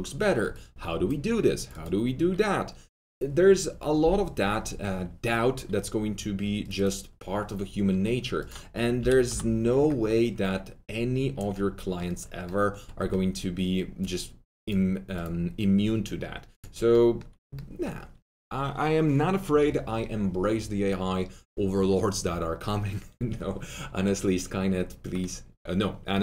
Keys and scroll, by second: 8.9 s, 9.2 y, 9.7 Return, 11.5 Return, 11.5 y.